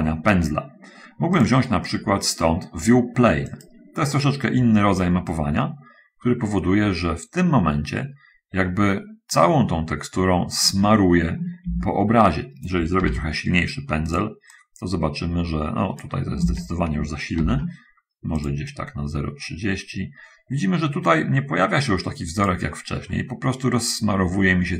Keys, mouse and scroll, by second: 1.7 click, 3.6 click, 5.4-11.2 drag, 12.0 ctrl+z, 13.3 shift+f, 14.1 click, 14.9-16.5 drag, 16.8 ctrl+z, 17.7 shift+f, 18.7-23.0 drag, 23.1 middle click.